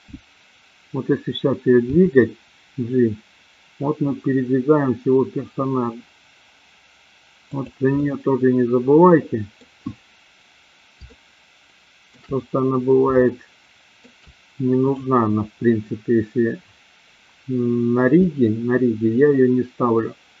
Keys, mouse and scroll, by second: 1.9 g, 7.9-9.7 middle drag, 11.0-12.2 shift+middle drag, 12.0 scroll down 1, 13.2 shift+middle click, 14.9 click, 18.2-20.4 middle drag.